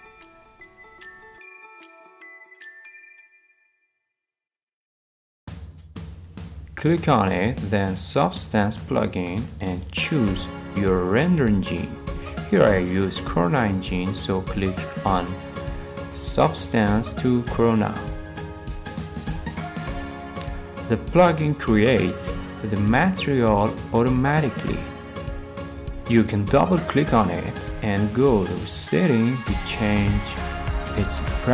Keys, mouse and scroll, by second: 0.0 click, 2.4 click, 3.2 middle click, 4.9 middle click, 4.9 middle click, 5.0 middle click, 5.5 middle click, 5.5 scroll down 3, 6.1 click, 6.1-6.5 scroll, 7.0 click, 8.1-9.1 drag, 18.7 click, 19.8-20.5 scroll, 21.1 middle click, 21.7 middle click, 22.0 middle click, 22.6-23.0 scroll, 24.5-25.5 scroll, 25.2 middle click, 26.0 click, 26.1 click, 27.7 click, 29.1 click, 30.7 scroll, 31.4-31.5 scroll.